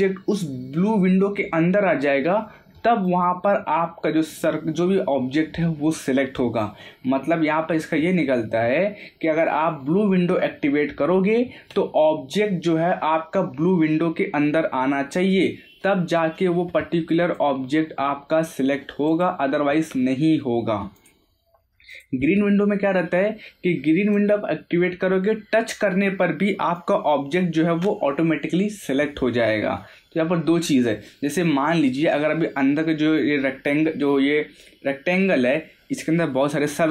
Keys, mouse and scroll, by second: 3.0 click, 15.3-17.2 middle drag, 17.2 click, 24.1 click, 26.7-29.5 drag, 29.8-32.1 middle drag, 32.1 scroll down 1, 32.9 scroll up 1.